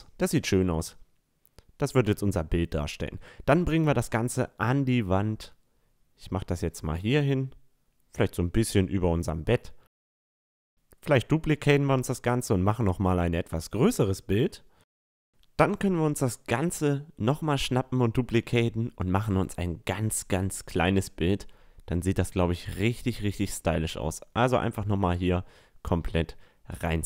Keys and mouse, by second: 0.3-0.7 drag, 1.8-3.6 drag, 1.8 middle drag, 1.8-2.2 right drag, 6.6-9.5 drag, 9.2 shift+d, 10.0-11.8 drag, 11.1 s, 14.5 click, 16.8 shift+d, 18.3-21.2 drag, 20.2 s, 25.3 s.